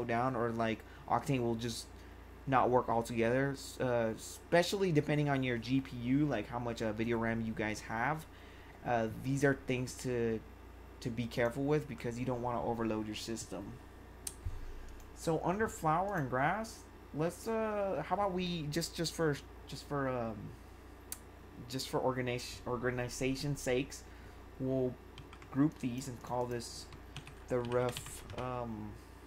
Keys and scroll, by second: 26.9-28.3 typing.